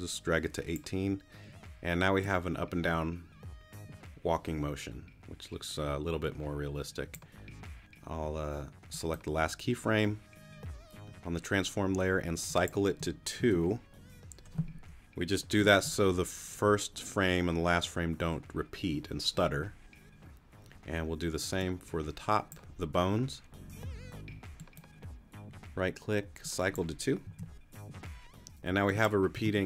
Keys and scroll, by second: 13.4 2, 27.2 2, 29.4 space.